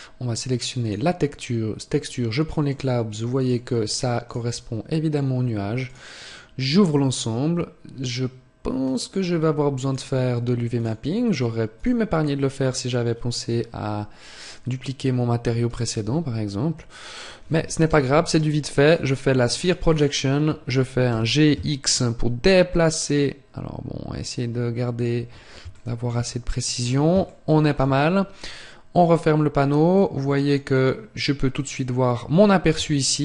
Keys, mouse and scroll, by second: 6.1 click, 8.5 click, 12.4 click, 20.9-21.2 scroll down 10, 20.9 g, 28.5 shift+middle click, 28.5 scroll down 2, 29.6 click.